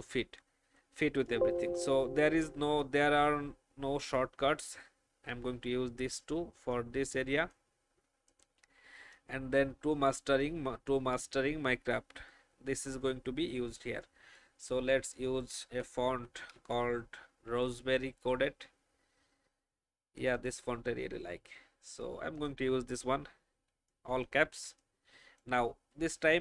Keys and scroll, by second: 1.1 alt+space, 16.5 typing, 23.7 alt+space.